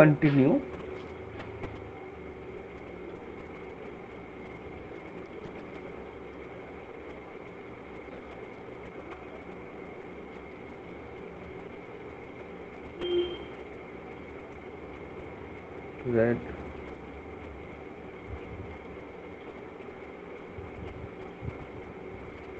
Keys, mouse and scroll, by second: 1.2 click, 8.8 click, 12.3 click, 20.6 click.